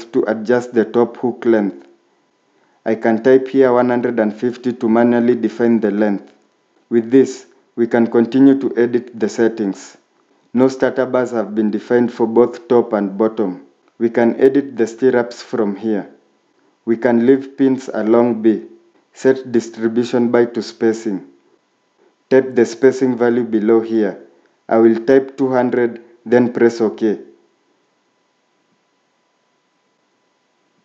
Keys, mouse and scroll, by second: 2.3 typing, 3.5 typing, 10.1 typing, 24.6-25.7 typing.